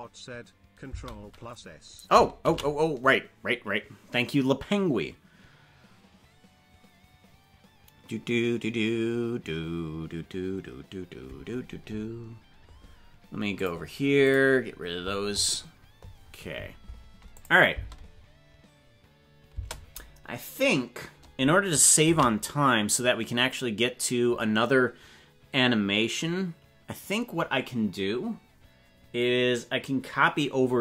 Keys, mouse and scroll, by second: 0.9 space, 2.6 ctrl+s, 17.4 click, 17.7 space, 19.5 space, 22.2 ctrl+s.